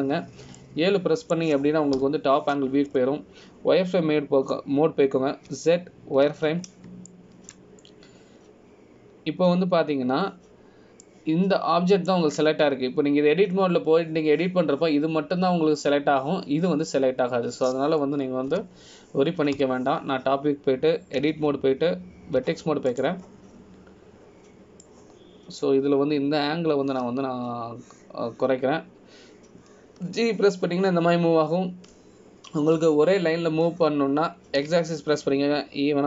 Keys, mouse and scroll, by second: 1.3 KP_7, 2.7 middle click, 4.1 KP_7, 5.1 scroll up 1, 5.7 scroll up 2, 7.6 z, 9.2 shift+middle click, 13.2 middle click, 20.7 KP_1, 21.7 KP_7, 23.4 Tab, 24.6 1, 25.1 click, 27.0 click, 29.1 g.